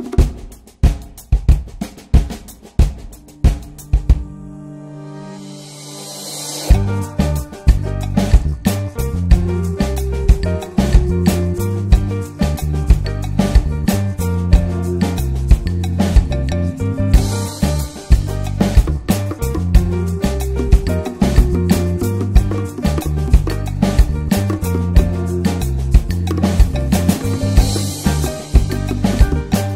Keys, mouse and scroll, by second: 2.1-8.5 drag, 10.0-11.9 drag, 12.2-16.0 drag, 16.0 scroll down 4, 16.1-16.7 scroll up 6, 16.7 middle click, 16.9 scroll down 2, 17.1 middle click, 17.3-18.1 scroll up 2, 17.4 middle click, 18.1-22.1 drag, 22.1 scroll down 2, 22.3 drag, 22.6-23.5 middle drag, 23.5 scroll up 1, 23.8-24.7 middle drag, 24.7 click, 25.3-26.6 drag, 28.6 click, 29.3-29.7 drag.